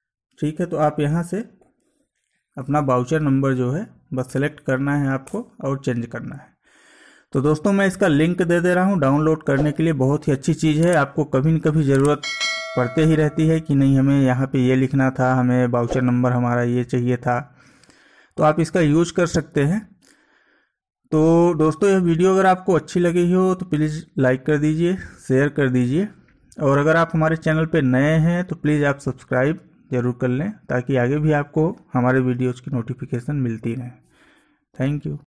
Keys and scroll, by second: 2.7 Down, 4.3 space, 5.0 Down, 5.3 space.